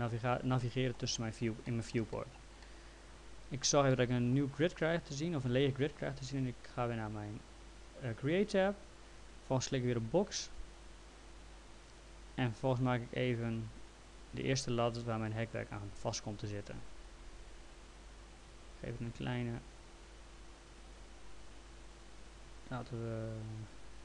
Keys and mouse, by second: 3.9 middle click, 8.4 click, 10.8 click, 12.5 click.